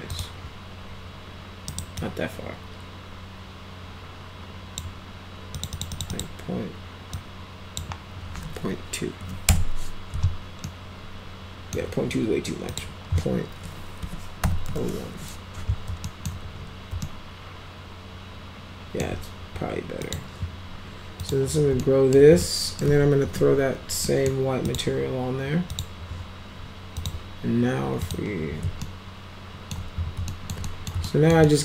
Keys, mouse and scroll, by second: 0.1 click, 1.7 right click, 2.0-4.8 drag, 5.6 click, 5.7 click, 5.9 click, 6.1 click, 7.1 click, 9.2 2, 10.7-11.7 alt+middle drag, 12.7 click, 14.0-15.2 typing, 16.1 alt+middle click, 17.0-19.1 alt+middle drag, 20.0 click, 21.2 click, 21.8-22.2 alt+middle drag, 22.4 alt+middle click, 23.2 m, 24.1 middle click, 24.7 click, 25.7 click, 27.0 click, 28.0 click, 28.9 alt+middle click, 29.3 alt+right click, 30.3 alt+right click, 30.7 right drag, 31.1 alt+right click, 31.5-31.6 right drag.